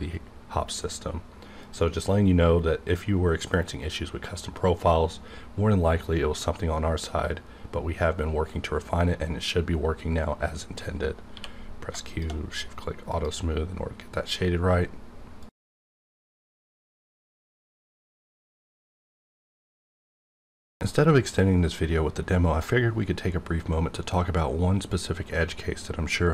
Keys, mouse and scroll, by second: 1.6 click, 2.2 click, 11.3 q, 12.0 shift+click, 13.1 click.